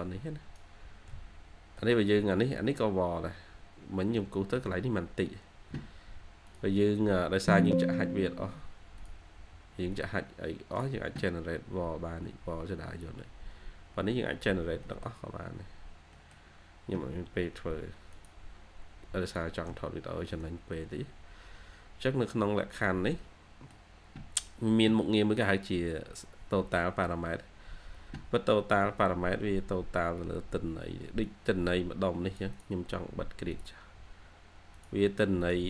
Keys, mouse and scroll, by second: 1.0 middle click, 2.1 middle click, 2.1-2.5 scroll up 1, 3.3 scroll down 1, 4.1 middle click, 11.8-12.2 scroll up 1, 13.6-14.6 scroll up 1, 14.7 middle click, 15.4 scroll down 1, 15.6 scroll up 1, 15.7 scroll down 1, 16.0 middle click, 16.4-17.0 scroll down 1, 19.6 middle click, 20.7 scroll up 1, 22.4 scroll down 1, 23.1 middle click, 23.9 scroll down 1, 28.9 scroll up 1, 30.4 scroll down 1.